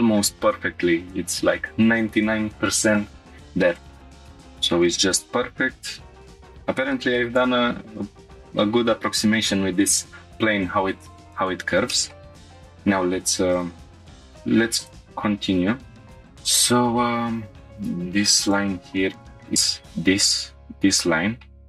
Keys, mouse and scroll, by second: 3.7 click, 4.2 scroll down 2, 4.3 shift+middle drag, 4.7 scroll down 1, 5.0-6.3 middle drag, 6.4-6.9 scroll up 2, 6.9-7.2 shift+middle drag, 7.5 scroll up 1, 11.4-11.9 scroll down 2, 11.9 shift+middle drag, 12.2 middle click, 12.3 scroll down 1, 13.5 click, 16.2 shift+middle click, 18.4 click, 19.1-19.9 scroll down 2, 21.5 scroll up 2.